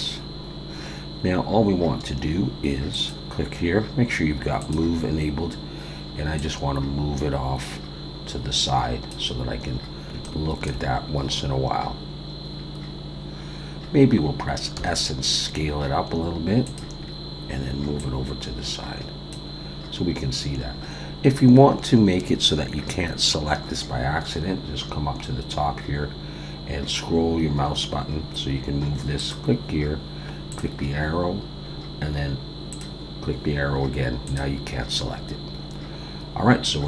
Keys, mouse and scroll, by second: 0.5 scroll down 2, 1.1-2.9 scroll down 1, 2.9 click, 6.4 click, 9.6-10.1 scroll up 2, 10.2 shift+middle click, 11.1-12.6 scroll up 1, 12.6 scroll down 1, 13.1-14.1 scroll down 2, 14.7 s, 17.0-17.8 scroll down 2, 18.0 click, 26.0 scroll down 1, 27.1-27.6 scroll down 1, 27.6-28.1 scroll up 3, 28.1-29.2 scroll down 3, 29.2 click, 32.7 click, 34.2 click, 34.9-35.6 scroll down 1, 35.6-36.8 scroll up 4.